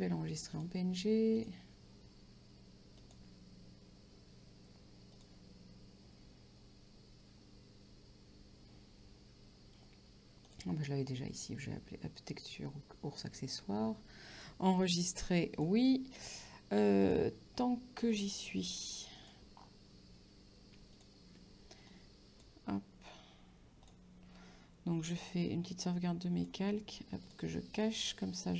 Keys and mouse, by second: 0.6 click, 3.3 click, 5.2 click, 10.5 click, 14.4 click, 17.7 click, 19.4 click, 21.2 shift+click, 27.8 click, 28.4 right click.